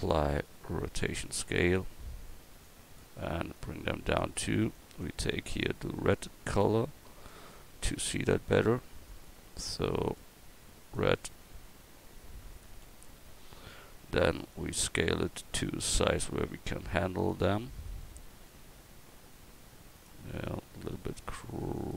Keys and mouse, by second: 4.8-11.9 drag, 11.9 middle click, 12.9 KP_1, 14.0-16.5 drag.